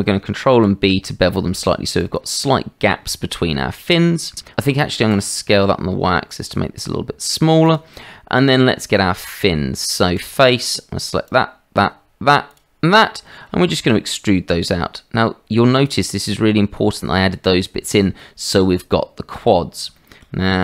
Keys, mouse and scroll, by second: 0.5 ctrl+b, 3.5 middle click, 4.4 Tab, 5.1 s, 8.0 middle click, 8.7 Tab, 11.3 shift+click, 12.5-13.5 shift+drag, 13.8 e, 16.2 click, 18.2-19.3 middle drag, 19.9 shift+middle click.